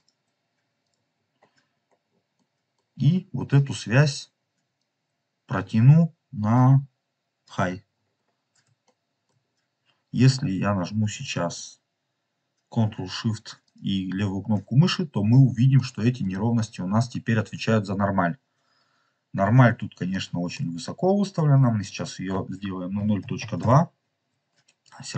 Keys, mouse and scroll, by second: 0.7 click, 1.1 scroll down 2, 1.7-2.2 scroll down 3, 2.3 middle click, 4.7-7.4 drag, 7.8 scroll up 3, 8.7 shift+middle click, 9.3 scroll up 2, 13.7 ctrl+shift+click, 14.7 scroll up 3, 15.6-16.2 middle drag, 15.7 scroll down 1, 16.4 scroll up 1, 19.0 scroll up 3, 19.9 shift+middle click, 20.9-21.7 scroll up 4, 21.8-23.9 drag.